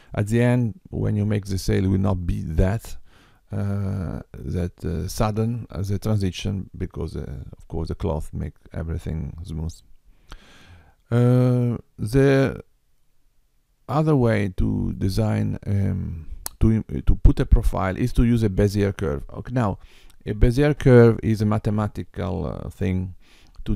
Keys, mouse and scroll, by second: 12.2 middle click.